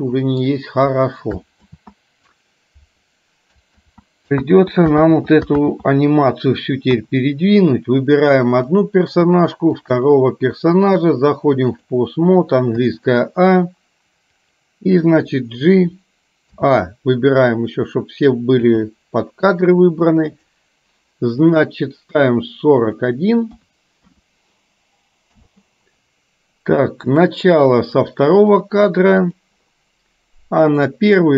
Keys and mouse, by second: 1.7 ctrl+z, 3.9 ctrl+z, 4.5 ctrl+z, 5.0 ctrl+z, 5.7 ctrl+z, 7.0 KP_1, 8.7 click, 9.8 shift+click, 10.9-12.0 drag, 13.0 a, 16.7 a, 18.8 g, 21.5 click, 22.9-25.4 drag, 27.2 click, 28.5 click, 29.4 click, 30.8 click.